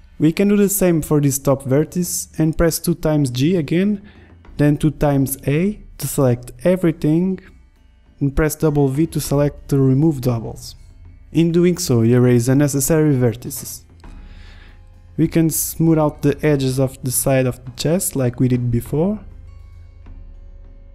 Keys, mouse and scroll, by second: 0.3 Tab, 0.4 g, 1.0 click, 2.8 g, 5.0 a, 5.2 a, 5.4 w, 6.8 a, 7.3 a, 7.7 w, 10.7 a, 12.5 g, 13.9 KP_1, 15.0 middle click, 15.1 g, 15.9 g, 16.3 Tab, 16.7 Tab, 16.8 click, 17.0 g, 17.4 g, 17.6 click, 18.0 click, 18.0 Tab, 18.1 Tab, 18.5 ctrl+z, 18.7 g, 18.8 click, 19.3 click, 19.6 ctrl+z.